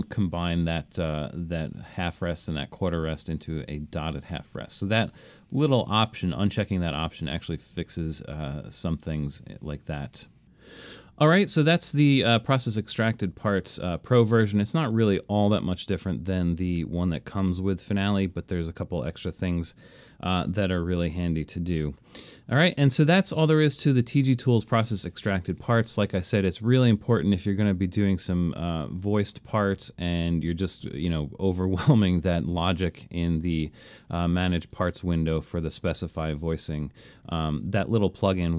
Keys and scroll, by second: 20.4 super+e.